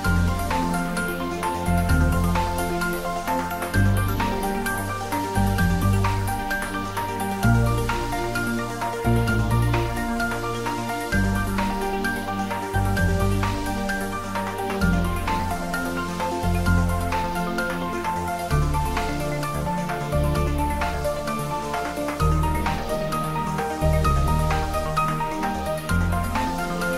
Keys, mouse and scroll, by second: 0.3 alt+shift+click, 3.6 s, 5.3 click, 6.5 scroll up 1, 8.0 click, 8.6 shift+z, 9.7 click, 12.1-12.7 middle drag, 13.8 3, 14.3 click, 16.4 alt+shift+click, 17.0-17.6 scroll down 1, 17.8 shift+z, 18.2 middle click, 20.0 e, 21.1 click, 21.5 scroll up 1, 21.9-23.1 middle drag, 23.7 ctrl+b, 25.7 click, 26.5 Tab.